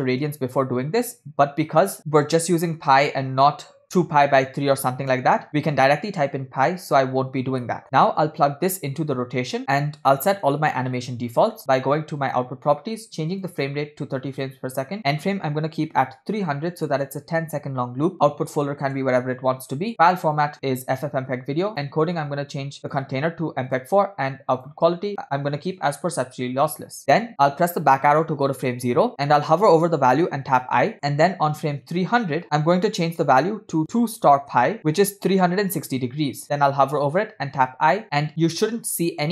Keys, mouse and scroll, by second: 7.8 middle click, 8.3-9.6 drag, 12.2 click, 13.5-14.7 drag, 15.0-17.0 drag, 16.6 0, 18.1 click, 18.8 /, 19.7-20.2 scroll down 4, 20.0-21.1 drag, 21.9 scroll down 1, 21.9 click, 22.5 scroll down 2, 22.8-23.9 drag, 24.6-26.2 drag, 27.8 Left, 30.3 click, 30.3 middle click, 30.9 middle drag, 30.9 scroll down 2, 32.6 Left, 32.6 click, 33.2-35.6 drag, 37.6 i.